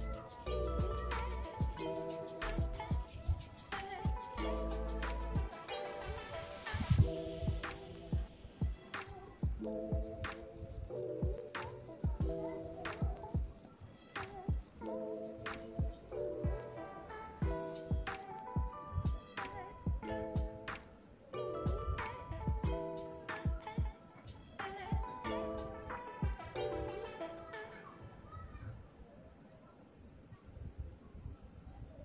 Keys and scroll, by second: 18.8 Tab, 21.8 Tab.